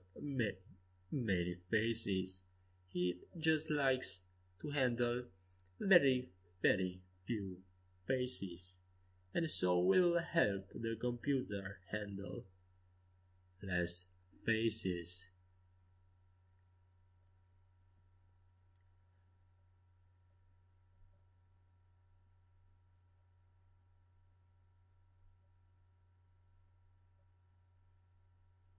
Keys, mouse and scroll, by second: 1.7 a, 3.2 c, 5.5 f, 8.1 a, 8.4 c, 9.9 f, 12.0 a, 12.8 c, 14.4 f, 15.9 a, 16.5 a, 17.0 a, 17.2 c, 19.6 f, 20.1-22.8 middle drag, 21.4 a, 21.4 c, 23.9 a, 24.6-27.1 middle drag, 25.7 c, 27.5 a.